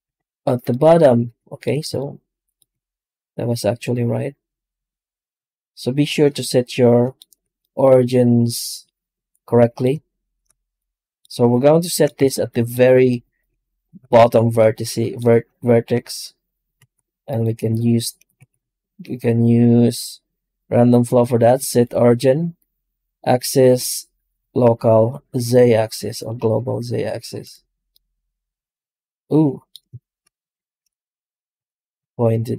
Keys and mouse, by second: 0.5-1.5 middle drag, 1.8 shift+middle click, 3.7-7.2 middle drag, 7.4-9.7 middle drag, 11.7-12.8 shift+middle drag, 12.5 alt+Tab, 13.1 alt+middle click, 13.5-13.8 shift+middle drag, 14.4-18.1 middle drag, 18.2 shift+c, 29.2 middle click.